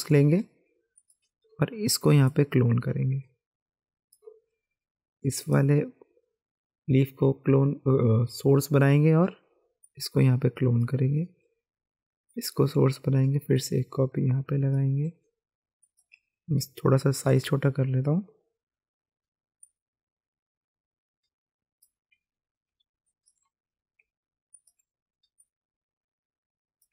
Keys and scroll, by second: 17.6 [, 22.7 space, 24.0 alt+space.